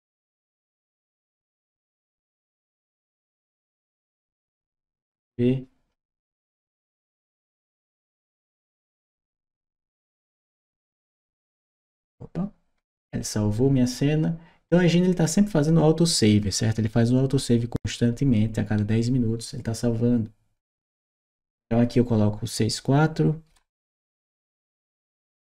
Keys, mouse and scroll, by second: 15.8 click.